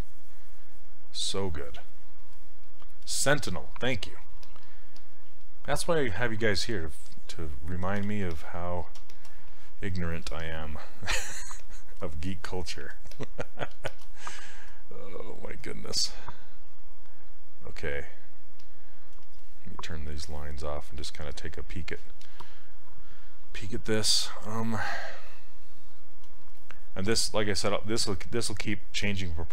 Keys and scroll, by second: 4.4 s, 8.1 ctrl+z.